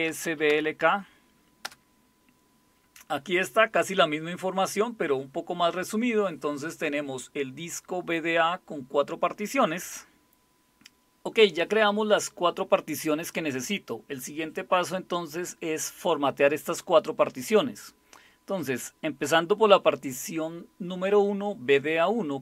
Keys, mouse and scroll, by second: 0.0-1.0 typing, 1.6 Return.